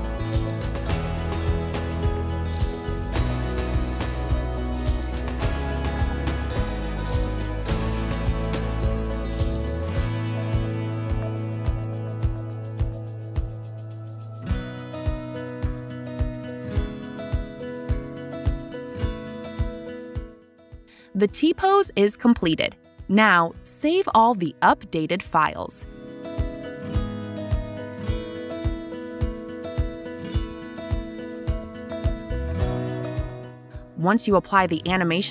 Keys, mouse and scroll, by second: 2.1 click, 6.9-7.8 typing, 7.1 right click, 8.3 click, 10.3 click, 11.3 click, 14.3 click, 19.4-20.1 typing, 21.2-22.0 typing, 26.4 click, 26.4 w, 26.5 right click, 26.5 s, 27.8 click, 27.8 right click, 28.7 click, 29.6 click, 32.0 right click, 32.0 typing, 33.6 click, 33.8 click.